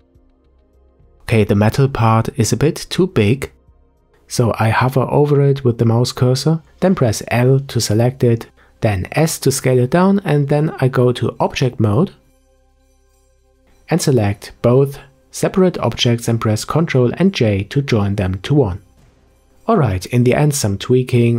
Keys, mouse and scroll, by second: 2.9 Tab, 3.6-4.6 middle drag, 4.6 scroll up 4, 6.3 l, 7.5 s, 10.0 click, 12.4 Tab, 13.0-14.6 middle drag, 14.6 click, 15.6 shift+click, 17.1 ctrl+j, 19.0-19.5 scroll down 4, 19.5-20.5 middle drag, 20.7 shift+middle click, 21.0 scroll up 1, 21.2 click.